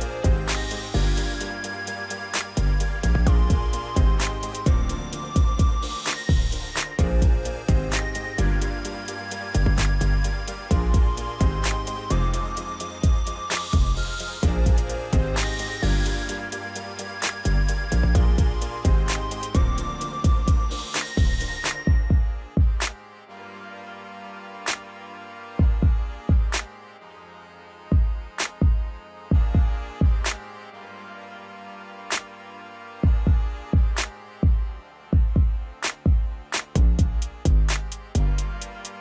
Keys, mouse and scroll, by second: 2.1-2.5 scroll down 6, 2.5-3.7 middle drag, 3.7-6.7 scroll up 2, 7.3 click, 8.4-11.5 drag, 12.0 click, 12.9-14.2 drag, 17.7-21.9 drag, 21.9 scroll up 2, 22.2-23.0 scroll down 1, 23.0 click, 23.6-25.6 middle drag, 25.6 KP_1, 26.4 scroll up 2, 26.6 scroll down 2, 26.8-29.6 middle drag, 29.6 KP_7, 30.9 KP_1, 31.8 KP_3, 32.9 ctrl+KP_7, 34.2 KP_1, 35.1-36.7 middle drag, 36.7 KP_0, 38.1 middle click.